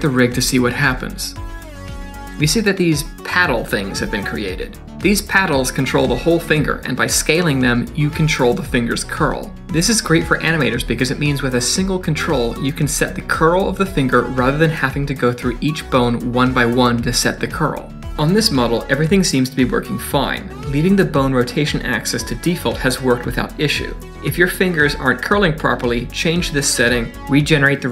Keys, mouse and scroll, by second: 0.8 click, 1.1 click, 1.7 scroll down 3, 1.8 middle click, 2.2 shift+click, 3.0 click, 3.3 Tab, 3.7 click, 3.9 middle click, 4.6 click, 4.9 middle click, 7.2 s, 22.5 middle click, 23.3 click, 26.9 Tab.